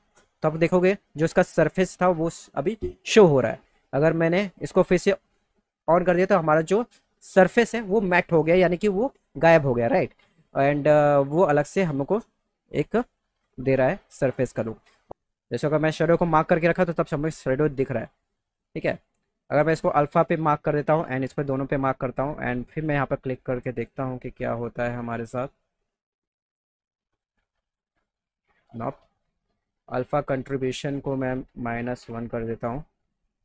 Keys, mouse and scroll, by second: 5.0 click, 15.2 click, 16.6 click, 19.0 click, 19.7 click, 20.7 click, 22.9 click, 27.9 click, 29.0 click, 29.8 click, 30.8 click.